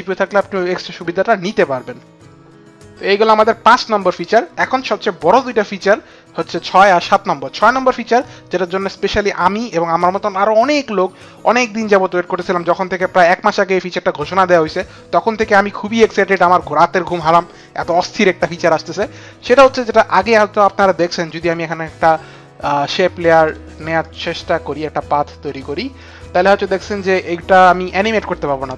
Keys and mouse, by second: 23.2 click, 23.8 click, 25.3 click.